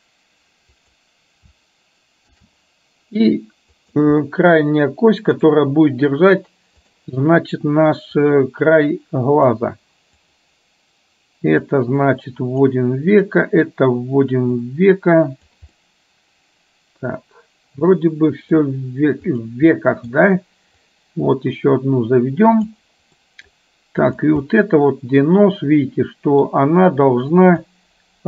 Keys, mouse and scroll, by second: 2.4 shift+d, 4.3-5.6 middle drag, 6.9 click, 8.3-9.6 drag, 10.4 click, 11.8-12.8 drag, 13.3 click, 14.6-15.6 drag, 15.8-18.7 middle drag, 19.4 click, 19.8 middle click, 20.9-22.8 drag, 23.3 middle click, 24.6-26.6 middle drag, 27.7-28.2 drag.